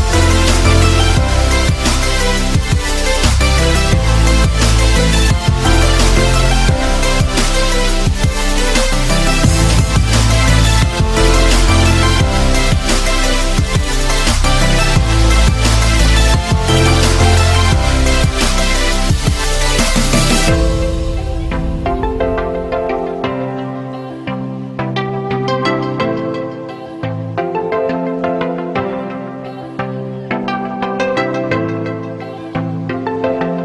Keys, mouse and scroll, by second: 0.9 right click, 2.5 right click, 8.0 right click, 8.9 right click, 9.4 right click, 9.8 right click, 10.1 right click, 11.4 click, 12.6 right click, 13.0 right click, 13.8 right click, 15.1 right click, 15.5 right click, 16.3 right click, 16.6 right click, 17.6 right click, 19.9 right click, 21.0 right click, 25.2 right click, 28.5 right click, 31.8 right click, 33.1 right click, 33.5 right click.